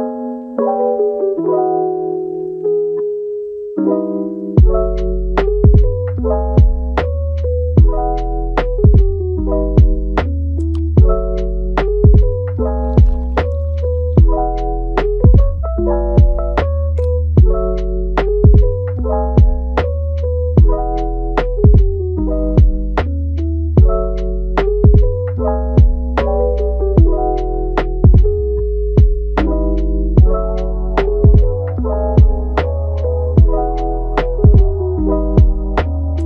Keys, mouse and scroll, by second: 1.8 click, 2.1-6.1 middle drag, 6.1 shift+d, 6.8-7.3 middle drag, 7.3 g, 9.4 Tab, 10.1 drag, 10.4 g, 11.4 drag, 11.7 g, 14.0 alt+s, 15.0 click, 15.4 alt+s, 17.4 click, 17.9 alt+s, 19.1-19.5 middle drag, 19.5 g, 20.8 click, 21.3-22.2 middle drag, 22.2 g, 23.3-25.6 middle drag, 25.6 g, 26.8 click, 27.1 g, 29.2 scroll up 3, 29.5-30.0 middle drag, 30.0 scroll down 4, 30.3-30.7 middle drag, 30.7 scroll up 1, 30.9-31.4 middle drag, 31.4 scroll up 1, 31.7 click, 32.0-32.6 middle drag, 32.6 g, 33.7 alt+s.